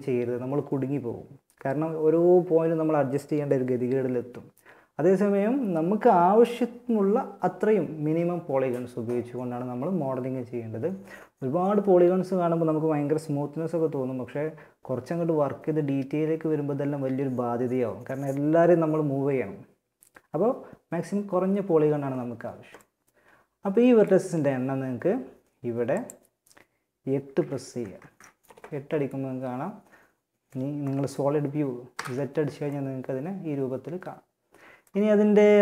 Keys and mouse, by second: 25.1-26.9 drag, 26.9-28.4 middle drag, 31.1 z, 34.1-35.6 middle drag.